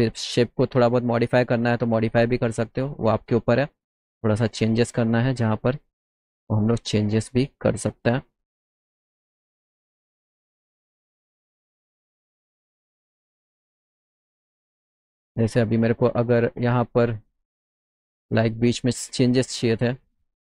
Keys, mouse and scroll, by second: 1.1-2.4 drag, 3.9 click, 5.2 click, 6.2-7.2 drag, 8.8 middle click, 8.9 middle click, 9.5 middle click, 10.3 middle click, 12.0 z, 12.4 middle click, 12.7 middle click, 15.6 click.